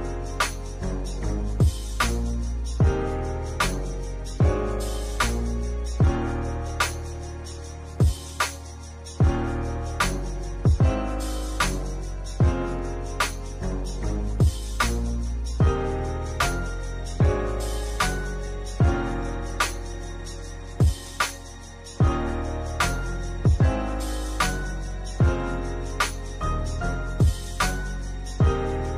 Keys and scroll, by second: 5.0 space, 21.5 space.